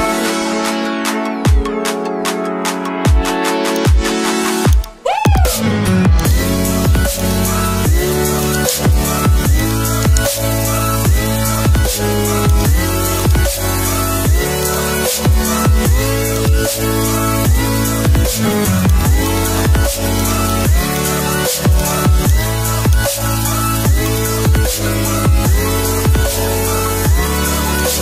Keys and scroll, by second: 1.4 ctrl+i.